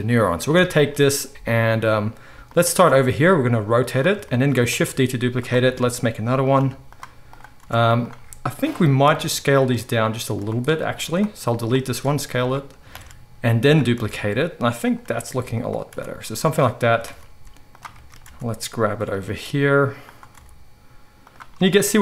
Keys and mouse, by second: 0.0-0.6 right drag, 0.6-4.4 shift+middle drag, 1.3 g, 2.7 r, 4.4-13.9 shift+right drag, 4.7 shift+d, 5.6 r, 6.5 g, 7.2 click, 7.2 middle click, 7.5 r, 9.7 s, 10.9 x, 11.9 s, 12.9 shift+d, 13.9-18.0 drag, 13.9 r, 15.0 g, 15.8 r, 17.0 shift+d, 18.0-22.0 shift+right drag, 18.2 r, 19.2 g, 20.3 r.